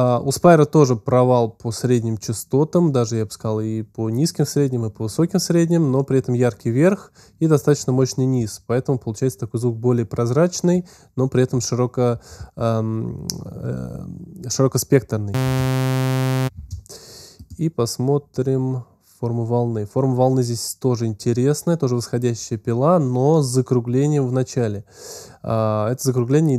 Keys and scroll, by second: 15.3 space, 16.1 space.